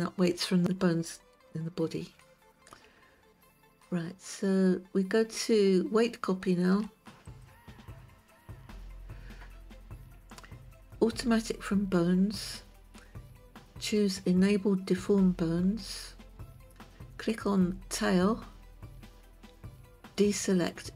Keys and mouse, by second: 7.8 click.